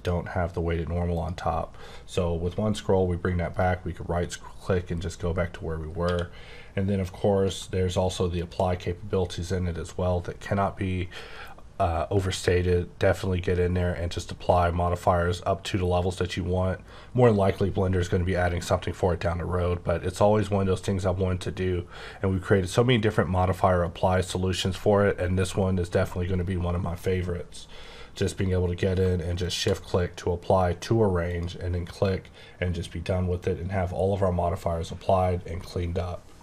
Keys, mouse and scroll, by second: 1.1 click, 2.0-2.4 scroll up 2, 3.5 right click, 6.1 q, 8.4 click, 29.4 click, 31.3 click.